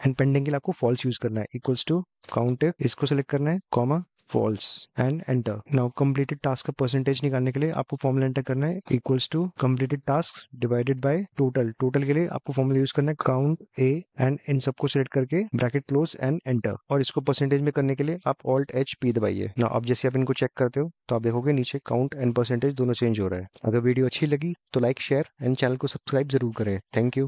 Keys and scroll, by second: 18.3 alt+h, 19.1 p.